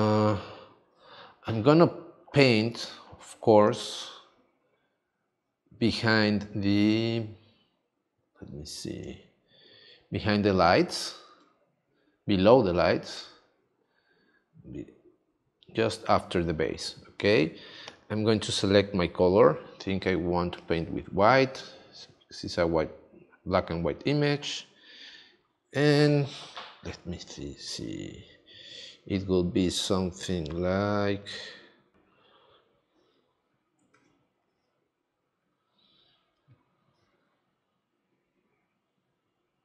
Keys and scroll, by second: 33.9 super+z.